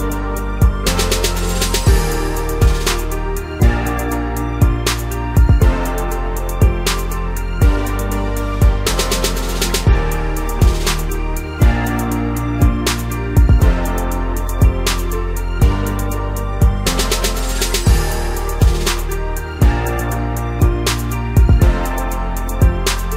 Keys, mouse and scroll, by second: 0.6 scroll down 1, 1.1 KP_1, 1.7-3.2 scroll up 1, 3.2-3.9 scroll down 3, 3.9-4.8 scroll up 1, 4.8 click, 5.3 scroll up 2, 5.7-6.1 scroll down 3, 6.6 shift+click, 8.3 shift+d, 12.3 shift+r, 13.7 ctrl+KP_6, 14.0 ctrl+KP_6, 16.4 click, 17.6 click, 19.2 click, 20.1-22.5 drag.